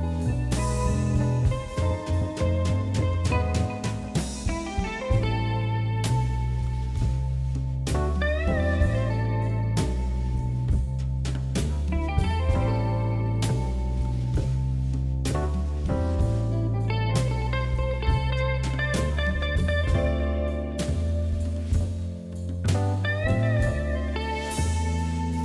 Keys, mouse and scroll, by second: 0.1 scroll down 3, 0.3 shift+middle click, 0.9 KP_1, 1.5 a, 1.8 g, 3.4 click, 3.6 scroll up 1, 3.9 shift+middle click, 4.3 click, 4.9 click, 5.1 scroll up 1, 5.3 scroll down 2, 5.6-7.1 middle drag, 7.4-8.0 scroll down 3, 8.0 click, 10.9-12.4 scroll up 1, 12.7 click, 12.9-14.3 middle drag, 14.3-14.6 scroll up 2, 14.6 KP_3, 15.1-15.5 scroll up 3, 15.5 shift+middle click, 15.7-16.2 scroll down 3, 16.2 middle click, 16.8 scroll up 2, 17.2 Tab, 17.4 scroll up 2, 17.7 click, 18.0 Tab, 18.2-20.2 shift+middle drag, 20.4 KP_1, 21.0 shift+middle click, 21.5-21.9 scroll down 1, 21.9-23.3 shift+middle drag, 23.3 Tab, 23.8 click, 24.3-25.4 scroll down 1.